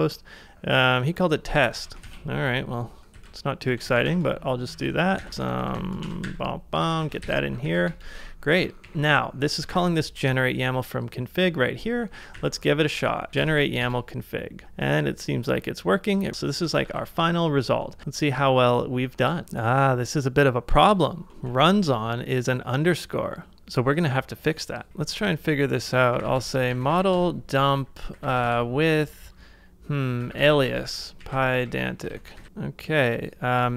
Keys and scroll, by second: 1.7 super+c, 2.1 super+Tab, 3.2 ctrl+c, 3.4-10.2 typing, 4.8 ctrl+c, 7.0 super+v, 8.7 ctrl+c, 11.4 shift+], 12.0 ctrl+a, 13.3 typing, 16.3 ctrl+a, 16.3 ctrl+w, 16.8 ctrl+a, 21.5 super+Tab, 24.9 super+t, 25.6-28.9 typing, 30.0-32.0 typing.